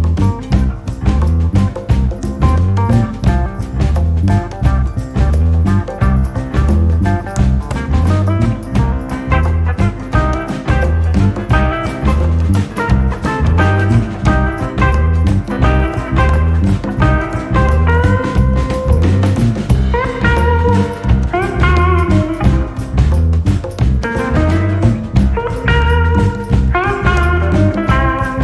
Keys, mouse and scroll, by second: 0.4 click, 2.3 click, 9.2 s, 19.1 click, 21.1 click.